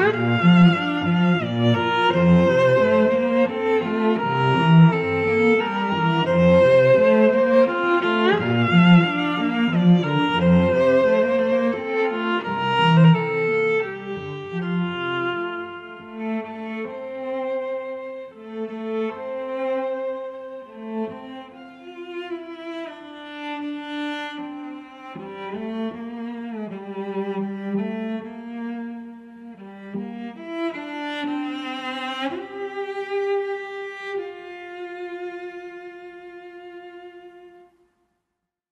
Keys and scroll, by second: 3.6 n, 4.5 n, 13.2 shift+s.